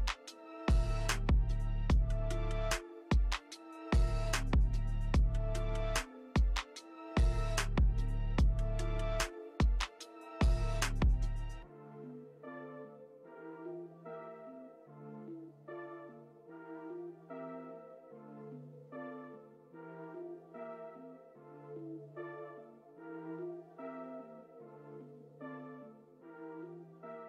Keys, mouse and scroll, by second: 4.2 alt+click, 9.5 alt+click.